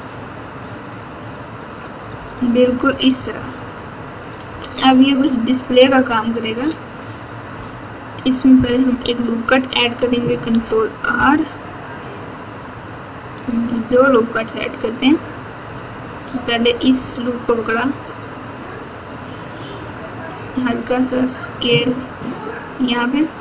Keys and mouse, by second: 2.6-3.3 typing, 4.4 KP_8, 8.8 KP_1, 10.4 ctrl+r, 20.6 s.